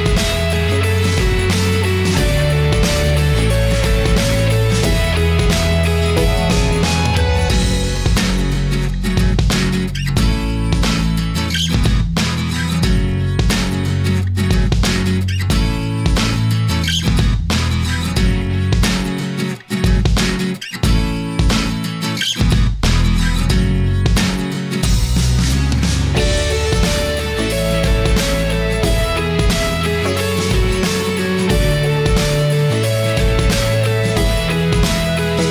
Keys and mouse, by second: 2.8 click, 4.3 shift+a, 10.1 n, 12.4 click, 13.3-15.4 drag, 16.0-18.2 drag, 19.1-26.7 drag, 28.3 shift+d, 29.7 click, 31.5 shift+d, 34.2-35.5 drag.